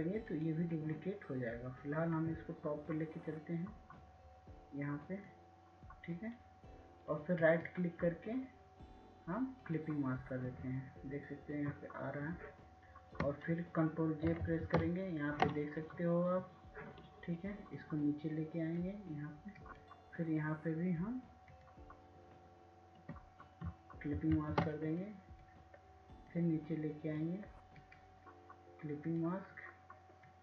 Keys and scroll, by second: 18.3 ctrl+j, 28.3 ctrl+j.